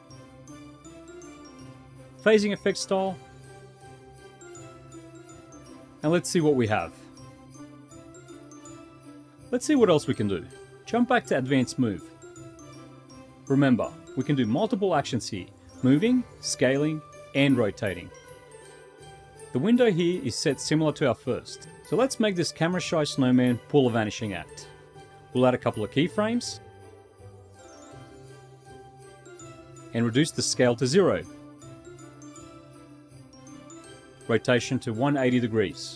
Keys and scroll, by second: 9.7 F11, 9.7 F8, 9.7 F6, 9.7 u, 22.3 w.